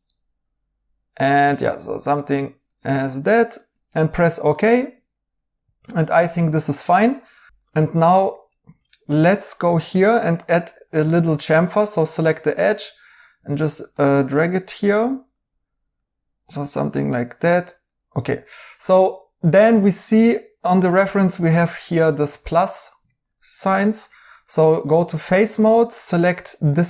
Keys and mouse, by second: 7.1 right click, 13.4 ctrl+z, 18.3 right click, 21.2 right click, 24.9 3.